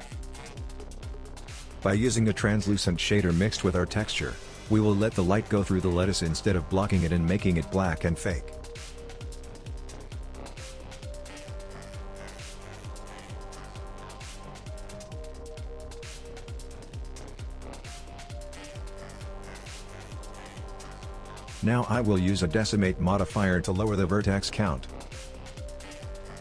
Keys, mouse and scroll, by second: 21.5 click, 21.6 click, 23.9 click.